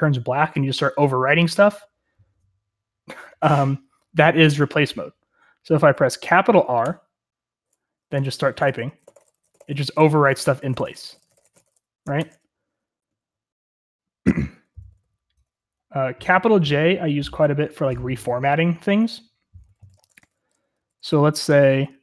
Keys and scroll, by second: 6.8 shift+r, 8.1-12.2 typing, 12.1 Escape, 14.3-16.5 typing, 19.7-22.0 typing.